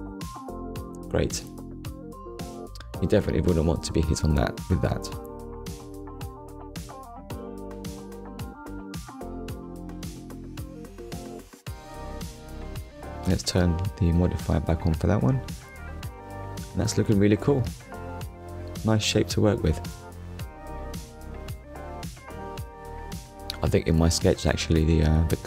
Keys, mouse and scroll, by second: 0.7 click, 1.3 Tab, 2.1 click, 2.5-3.0 scroll down 2, 4.1 middle click, 7.8-8.1 scroll down 2, 8.1 shift+middle click, 9.6 click, 10.2 click, 10.9 middle click, 13.4 click, 15.3 click, 15.8 click, 16.2 middle click, 18.0 shift+middle click, 20.4 shift+middle click, 21.5 middle click, 22.7-23.1 scroll down 1, 24.1 click, 25.2 KP_Decimal.